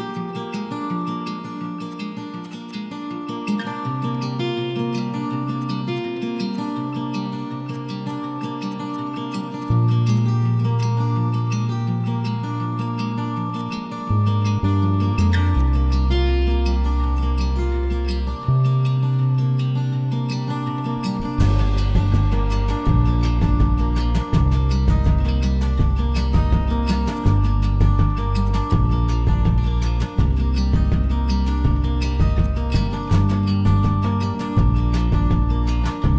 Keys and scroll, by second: 0.6 Delete, 11.2 typing, 11.3 Return, 18.6 typing, 19.0 Return, 20.5 typing, 22.8-24.0 typing, 25.3-26.0 typing, 27.3-29.9 typing, 32.7-33.4 typing.